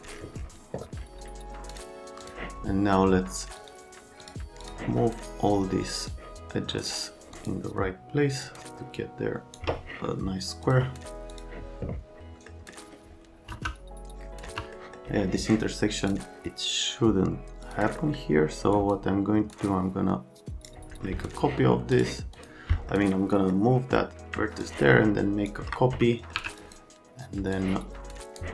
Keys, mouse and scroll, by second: 1.7 click, 2.2 click, 3.5 click, 4.2 click, 4.6 click, 6.1 click, 7.3 click, 8.4 click, 10.6 click, 11.3 click, 12.5 middle click, 13.5 F3, 14.4 F3, 14.7 middle click, 16.0 click, 17.6 click, 17.9 middle click, 18.7 click, 19.5 right click, 21.9 right click, 22.3 right click, 22.7 right click, 23.3 right click, 24.6 ctrl+shift+click, 26.1 right click, 26.3 1, 26.6 click, 27.5 click.